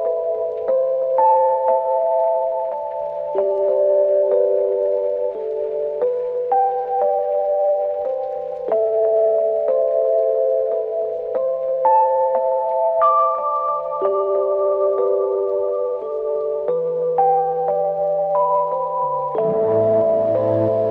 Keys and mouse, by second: 12.6 double click, 17.8 alt+click.